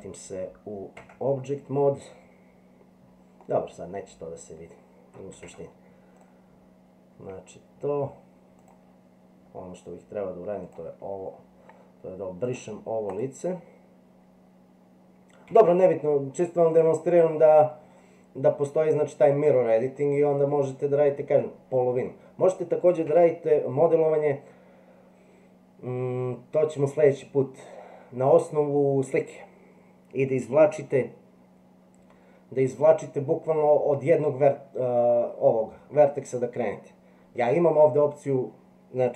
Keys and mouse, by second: 1.0 Tab, 3.5-4.7 middle drag, 5.5 Tab, 6.2 click, 8.6 click, 10.6 click, 12.5 click, 15.5 x, 17.4-21.0 middle drag, 23.1 Tab.